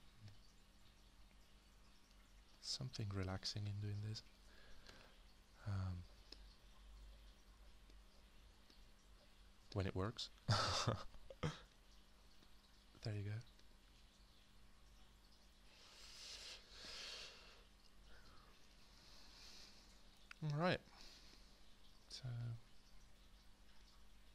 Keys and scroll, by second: 4.8 alt+g.